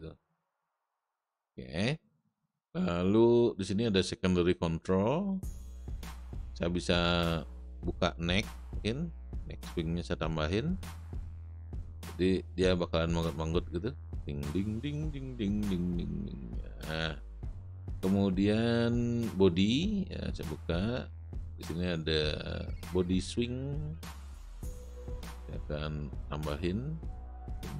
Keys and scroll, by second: 1.1 space, 13.4 space, 16.7 space.